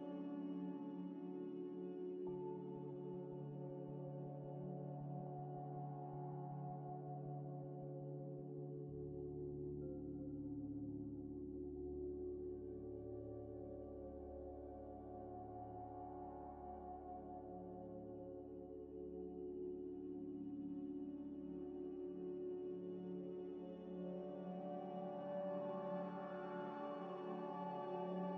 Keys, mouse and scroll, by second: 0.1 scroll up 1, 4.0 double click, 7.8 scroll up 1, 10.1 double click, 10.3 Delete, 11.0 F3, 11.1-12.0 typing, 16.7 middle click, 19.7 scroll up 1, 19.8 scroll down 1, 19.9 scroll up 1, 25.0 scroll down 1, 25.5 middle click, 26.4 scroll up 1, 26.9 scroll down 1, 27.5 middle click, 28.3 scroll down 1.